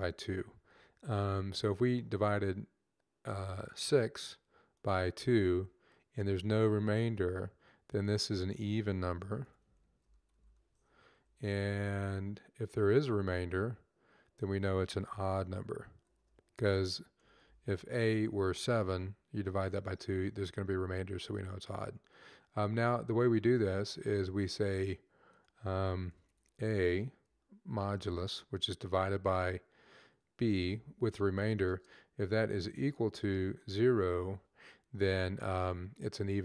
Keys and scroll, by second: 0.0-0.1 typing, 2.6 typing, 9.5-10.9 typing, 15.7-17.2 typing, 27.8 typing, 30.3 Right, 30.4 Right, 32.2 typing, 33.2-33.9 typing.